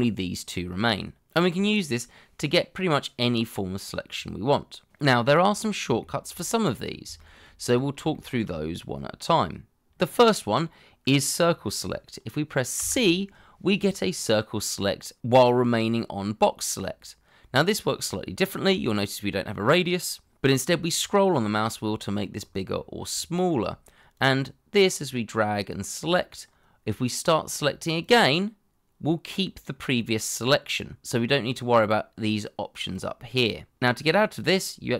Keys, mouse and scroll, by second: 6.0 shift+middle click, 6.5 middle click, 7.2 shift+middle click, 8.1 shift+middle click, 12.8 c, 20.6-21.7 scroll down 1, 22.0-22.7 scroll up 1, 22.7 scroll up 1, 22.7-23.4 scroll down 1, 23.4-25.7 scroll up 1.